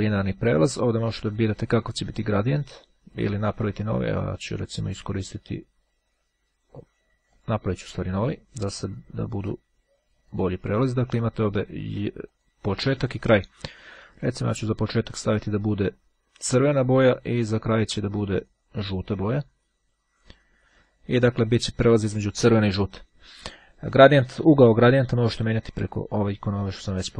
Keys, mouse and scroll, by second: 1.2 click, 3.1-4.6 drag, 7.0-8.0 drag, 10.4 click, 11.5-13.0 drag, 13.9-15.9 drag, 17.0 click, 17.8 click, 18.6 click, 20.8 click, 25.8 click.